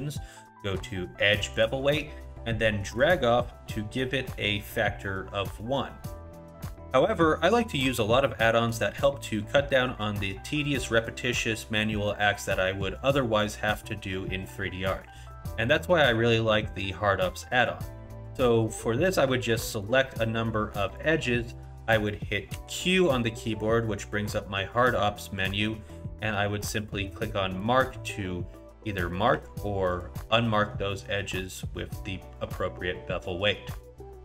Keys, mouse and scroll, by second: 6.3 click, 19.8 alt+click, 20.9 alt+shift+click, 22.5 q, 29.4 q, 31.0 scroll up 1, 31.4 middle click.